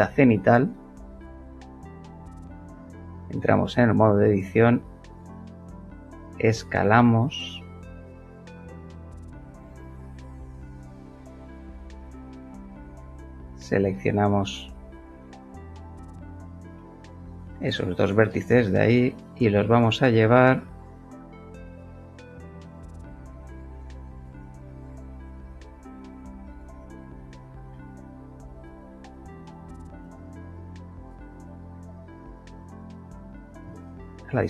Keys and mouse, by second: 2.7 Tab, 4.2 s, 9.4 click, 10.6-11.6 middle drag, 11.8 shift+middle click, 13.0 shift+click, 13.7 shift+click, 15.3 shift+click, 16.7-21.8 shift+middle drag, 20.6 g, 21.8 y, 25.5 click, 26.4-27.9 middle drag, 29.8 middle click, 30.1 middle click, 31.4 click, 33.1 click, 33.5 KP_0, 33.6 Return.